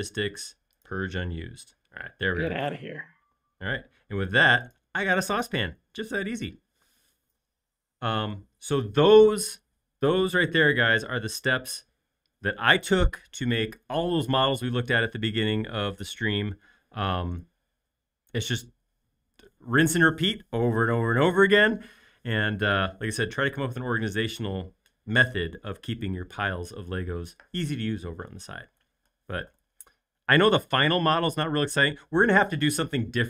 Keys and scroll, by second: 3.8 space.